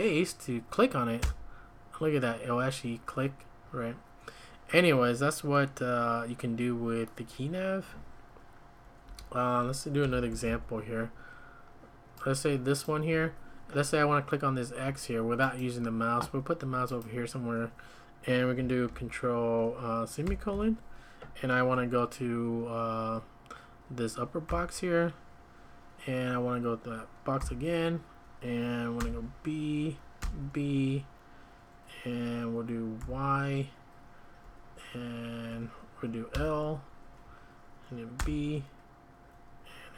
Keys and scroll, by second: 1.2 space, 9.1 Escape, 10.3 alt+super+f, 20.2 ctrl+;, 24.5 u, 27.4 u, 29.0 b, 30.2 b, 33.0 typing, 36.3 typing, 38.2 b.